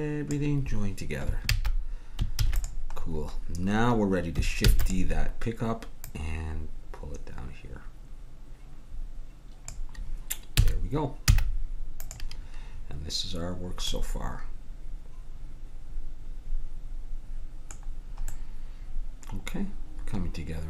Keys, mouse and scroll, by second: 1.5 ctrl+z, 2.4 ctrl+s, 4.8 shift+d, 6.0-7.8 drag, 10.6 a, 11.2 z, 15.9 middle click, 17.9-19.4 middle drag.